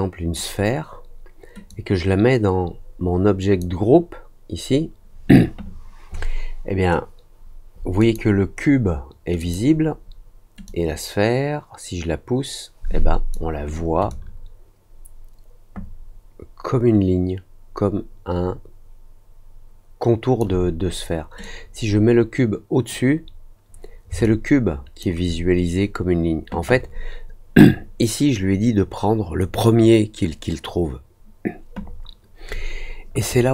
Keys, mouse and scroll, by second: 1.6-3.5 drag, 7.9 click, 9.3 click, 10.6-13.2 drag, 14.0-20.3 alt+drag, 21.3-22.8 drag, 24.2 alt+click.